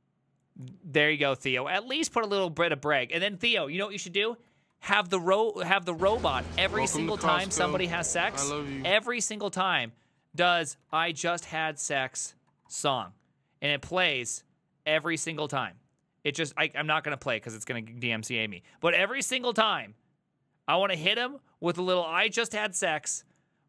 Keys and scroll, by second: 4.8 ctrl+t, 6.1-7.1 typing, 10.6-12.5 typing, 12.5 Down, 12.7 Return.